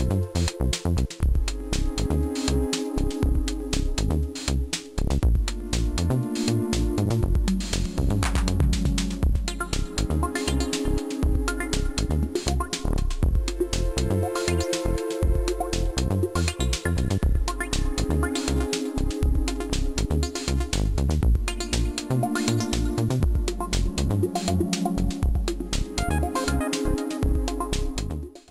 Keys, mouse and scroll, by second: 0.0-2.6 scroll up 34, 2.6 click, 4.1 click, 4.6 middle click, 5.9 click, 6.1 click, 6.8 click, 7.4 click, 7.7 click, 8.8 click, 9.7 click, 10.1 click, 10.9 click, 11.2 click, 11.8 click, 14.0 click, 15.1 click, 15.7 click, 18.6 click, 19.6 click, 19.9 middle click, 20.1 space, 20.9 space, 21.6 click, 25.0 middle click.